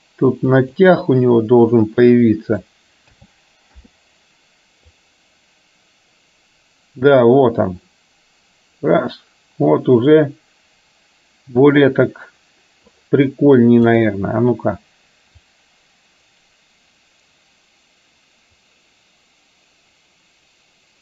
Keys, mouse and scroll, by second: 2.0-2.7 middle drag, 3.2 a, 3.8 i, 5.1-13.1 drag, 13.8 click, 15.6-21.0 drag.